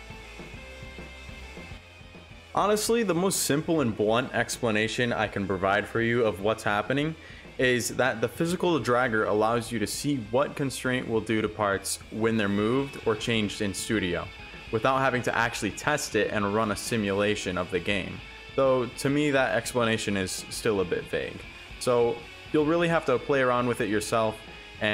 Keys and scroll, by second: 0.5 7, 0.8 5, 1.0 Return, 4.1 Return, 4.4 Return, 6.5 5, 6.5 Return, 8.1 Return.